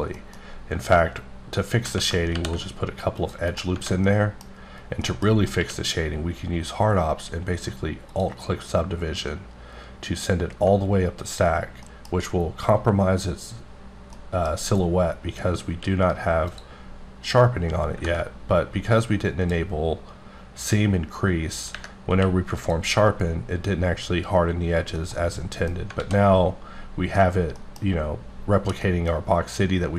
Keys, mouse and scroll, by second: 0.2 middle click, 1.0-1.5 scroll up 1, 2.3 ctrl+r, 2.6-3.2 scroll up 8, 3.2 click, 3.5 right click, 4.0 middle click, 5.0 middle click, 5.2 scroll down 1, 5.6 q, 9.5 alt+click, 11.8 middle click, 14.1 middle click, 15.7 q, 16.5 click, 19.3 click, 22.1 q, 22.6 click, 24.8 scroll down 1, 25.0 middle click, 25.8-26.8 scroll up 2, 26.0 alt+a, 26.8-27.3 scroll up 2, 27.3 scroll down 1, 27.6 middle click, 28.2-28.8 scroll down 1, 28.8 middle click.